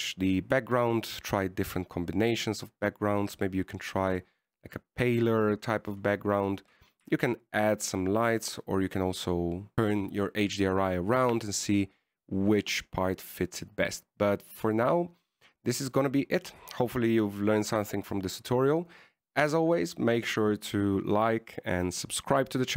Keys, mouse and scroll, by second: 0.2 middle click, 0.5-1.0 scroll down 1, 1.0 click, 8.0-9.2 scroll down 2.